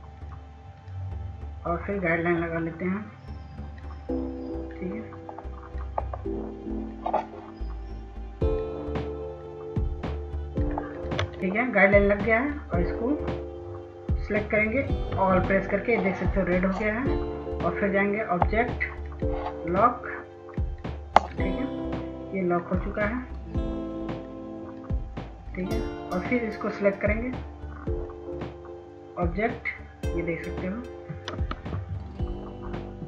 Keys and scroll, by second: 15.7 ctrl+a, 32.4 ctrl+s.